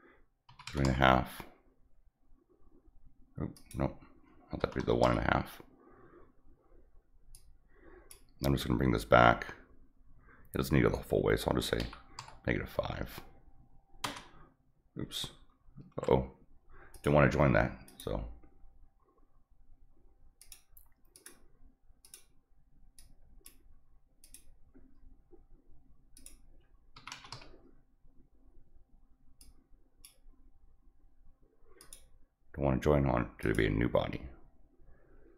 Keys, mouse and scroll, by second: 3.5 click, 7.3 click, 15.9 ctrl+z, 16.9 click, 17.8 click, 20.4 click, 21.1 click, 22.0 click, 22.9 click, 24.2 click, 26.1 click, 29.4 click, 31.8 click, 33.4 click.